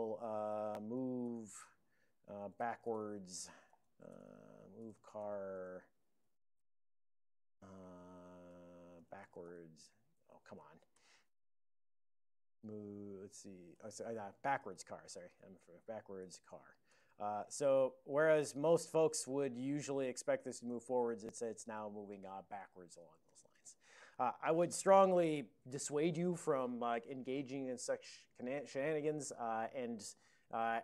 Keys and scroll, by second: 0.2-6.4 typing, 4.2 alt+BackSpace, 6.6 alt+BackSpace, 7.8-11.4 typing, 10.6 Tab, 11.8 Tab, 12.1 Tab, 14.0 alt+BackSpace, 14.3-17.1 typing, 20.8 ctrl+f, 21.1 ctrl+f, 21.4 ctrl+f, 21.8 ctrl+f.